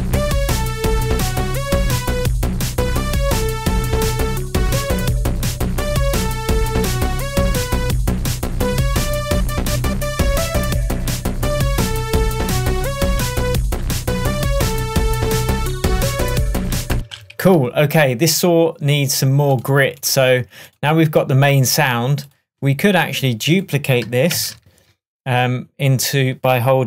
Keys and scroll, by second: 0.4 space, 17.0 space, 17.4 super+s, 24.4 super+d.